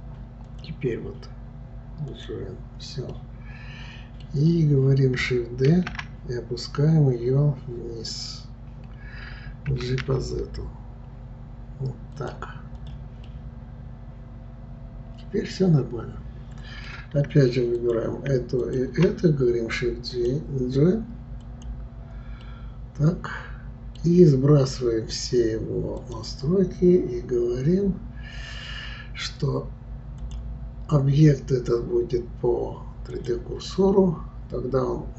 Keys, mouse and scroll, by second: 0.5-3.1 drag, 3.1-5.7 middle drag, 5.7 shift+d, 12.8 click, 13.3-16.4 middle drag, 17.8 click, 18.6 shift+click, 20.1-22.4 drag, 22.4-25.5 middle drag, 26.0 click, 30.2-33.2 drag.